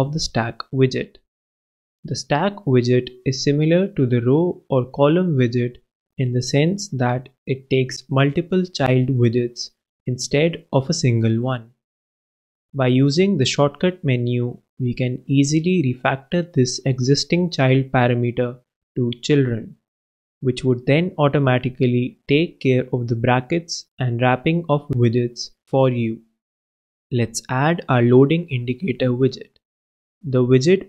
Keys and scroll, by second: 0.2 alt+Return, 1.5 alt+Return, 2.1 shift+Return, 2.5 shift+s, 2.8 shift+t, 7.9 super+Return, 7.9 super+Right, 9.2 super+,, 9.6 alt+super+l, 10.5 alt+super+Up, 11.2 alt+Right, 11.4 alt+Return, 12.1 alt+Down, 21.0 super+Return, 21.1 super+Right, 22.5 super+,, 22.7 alt+super+l, 24.0 alt+super+Up, 24.5 super+Up, 24.6 super+Right, 30.0 super+Right, 30.4 super+Return, 30.7-30.8 typing.